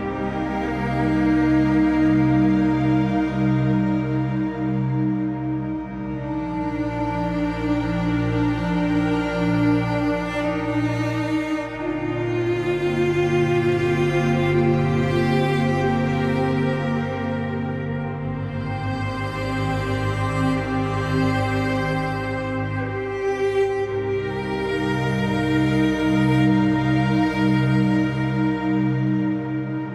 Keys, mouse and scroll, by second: 1.3 click, 6.8 shift+a, 8.8 ctrl+t, 13.7 click, 14.0 shift+d, 15.2 shift+d, 21.3 click, 22.7 click, 26.8 shift+a, 28.7 shift+d.